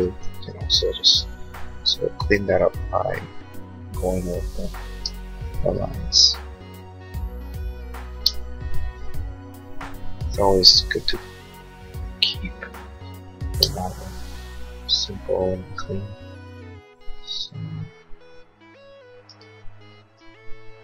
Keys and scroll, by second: 0.4 l, 4.9 space, 6.2 l, 8.2 space, 11.2 l, 13.5 space, 13.9 Escape.